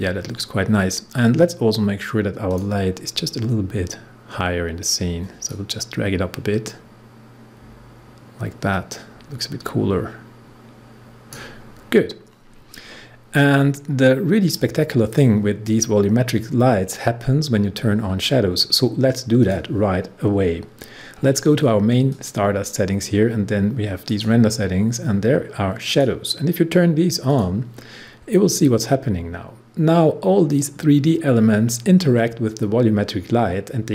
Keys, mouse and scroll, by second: 0.1-1.9 scroll down 1, 2.4 click, 5.4-11.7 drag, 11.7 scroll up 1, 14.5-17.5 drag, 19.3 click, 21.0-22.1 scroll up 1, 22.1 click.